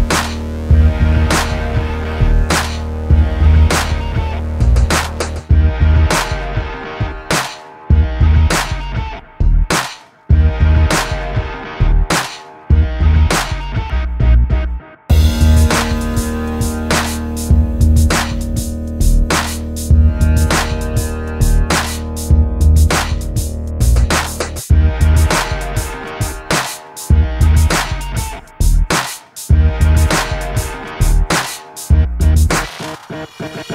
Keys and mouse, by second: 0.2 click, 0.4 h, 0.6 Tab, 0.8 KP_1, 1.6 click, 2.1 e, 2.8 ctrl+Tab, 3.1 click, 3.5 p, 4.0 click, 5.1 Tab, 5.5 a, 5.7 KP_1, 5.9 z, 6.6 click, 7.5-8.9 typing, 9.5 middle click, 10.3 ctrl+r, 11.2 middle click, 11.4 KP_1, 11.6 z, 12.2 click, 12.7 z, 12.9 click, 13.4 ctrl+r, 14.6 click, 15.2 s, 16.1 ctrl+r, 16.5 click, 16.8 z, 17.1 Tab, 17.5 h, 17.8 Tab, 18.5 a, 19.5 KP_1, 19.7 z, 20.1 ctrl+shift+b, 21.4 z, 21.9 i, 23.4 click, 23.7 i, 24.5 alt+s, 25.3 click, 26.2 ctrl+2, 27.0 click, 27.3 middle click, 27.4 click, 27.8 middle click, 28.0 click, 28.3 click, 28.6 i, 29.3 alt+s, 30.1 i, 31.3 KP_1, 31.5 z, 31.9 click, 32.1 z, 32.8 alt+s, 33.6 middle click.